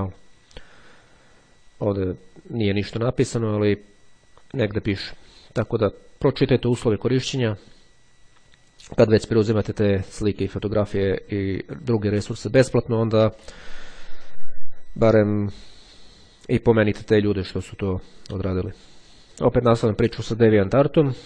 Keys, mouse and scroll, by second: 8.8-12.8 drag, 19.2 click.